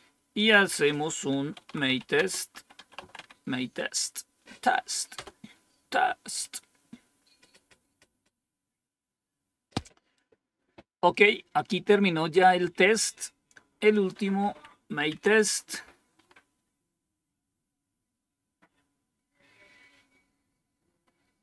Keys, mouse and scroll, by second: 0.3 click, 1.3-3.6 typing, 5.1 Return, 13.9 click, 14.4 Up, 15.0 Down, 16.1 scroll up 1, 21.0-21.4 scroll up 1.